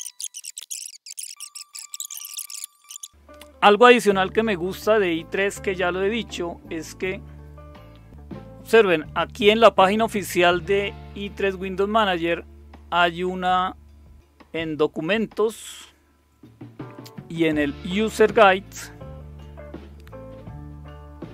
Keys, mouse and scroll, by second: 1.9 click, 2.8 super+4, 2.9 super+Return, 4.0 super+2, 10.1 click, 18.0 click.